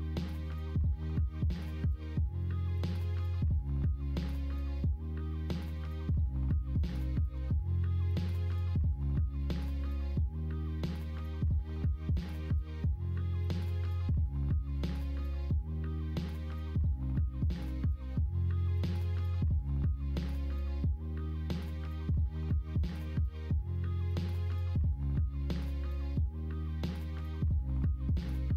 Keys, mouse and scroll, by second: 0.9 middle click, 1.5 Tab, 6.0 middle drag, 6.6 middle drag, 7.1 alt+z, 7.4-9.7 middle drag, 9.9 Tab, 10.1 middle click, 12.4 3, 13.5 alt+z, 13.7 middle click, 14.3 middle click, 16.0 middle click, 16.5 middle click, 17.4-21.1 middle drag, 22.5 middle click, 26.2 middle click, 28.2 middle click.